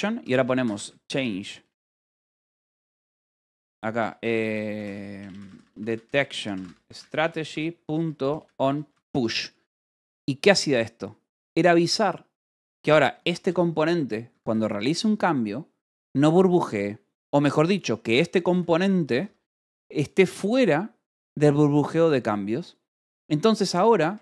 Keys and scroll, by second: 0.0-8.7 typing, 9.2 Escape, 10.4 shift+v, 11.2 Escape, 12.6 k, 13.1 v, 13.4 j, 14.2 Escape, 14.4 k, 18.5 j, 19.5 Escape, 23.6 j.